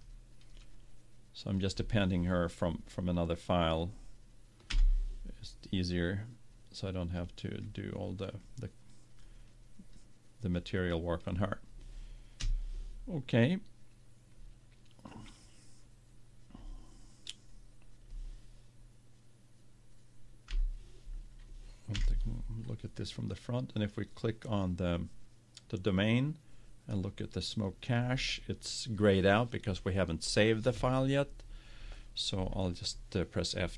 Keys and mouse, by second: 0.0-1.7 drag, 4.8 KP_7, 7.2-11.8 drag, 12.4 KP_0, 20.5 KP_7, 21.9 KP_1, 23.8-24.8 drag, 24.8-26.3 right drag, 27.0-29.0 right drag.